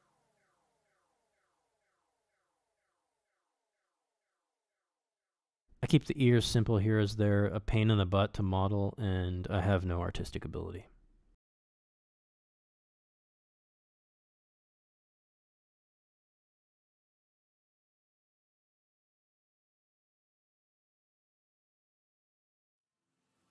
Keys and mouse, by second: 1.2 middle click, 1.6 shift+middle click, 2.0 middle click, 2.5 ctrl+Tab, 2.9 f, 3.1 middle click, 3.2 f, 3.5 shift+click, 3.9 shift+click, 4.4 shift+click, 4.8 shift+c, 4.9 click, 5.2 f, 5.4 click, 5.6 middle click, 5.8 shift+middle click, 6.2 middle click, 6.4 click, 6.5 click, 6.7 click, 6.9 click, 7.1 click, 7.5 middle click, 7.7 click, 7.9 click, 8.2 click, 8.4 click, 8.7 middle click, 8.8 middle click, 9.4 f, 9.5 middle click, 9.8 x, 10.3-12.2 ctrl+drag, 12.3 middle click, 12.4 f, 12.7 middle click, 12.8 shift+click, 13.0 ctrl+click, 13.4 middle click, 13.5-15.3 ctrl+drag, 15.6 ctrl+click, 16.4 middle click, 16.5-17.7 ctrl+drag, 17.7 middle click, 17.9 ctrl+click, 18.6 ctrl+click, 19.1 middle click, 19.3 shift+click, 19.5 shift+click, 19.7 shift+click, 19.9 shift+click, 20.4 middle click, 20.5 shift+click, 20.7 middle click, 20.9 shift+click, 21.2 middle click, 21.5 shift+click, 22.0 shift+click, 22.4 middle click, 22.8 middle click, 22.9 shift+middle click, 23.4 f.